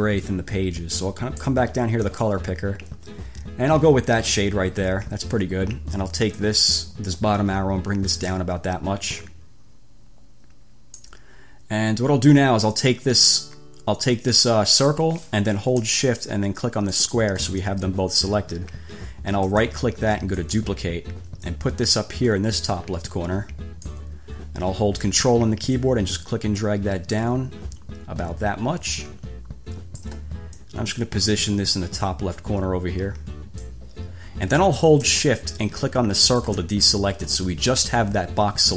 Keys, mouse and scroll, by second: 2.2 click, 6.5-11.4 drag, 14.9 click, 17.2 shift+click, 19.7 click, 20.6 click, 21.6-24.3 drag, 26.0-30.4 ctrl+drag, 30.8 click, 36.4 shift+click, 37.5-38.1 ctrl+scroll up 2.